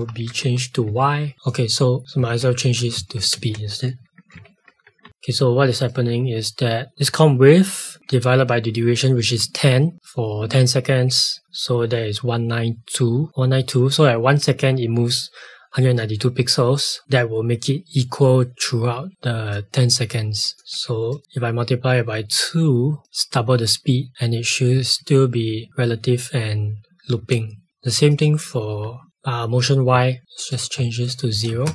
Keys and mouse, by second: 1.3 click, 2.6 Return, 2.9 Right, 3.3-5.5 typing, 5.9 click, 13.3 click, 17.0 click, 20.5 click, 20.7 2, 21.1 click, 24.7 space, 27.7 click, 28.7 1, 30.3 click, 31.3 KP_0, 31.5 KP_Enter.